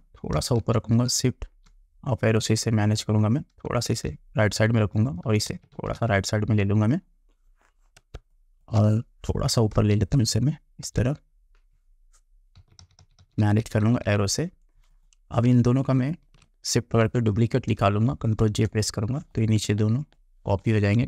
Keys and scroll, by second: 0.7 shift+Up, 4.0 shift+Right, 5.6 shift+Right, 8.2 space, 10.0 shift+Up, 12.7 Down, 18.5 ctrl+j.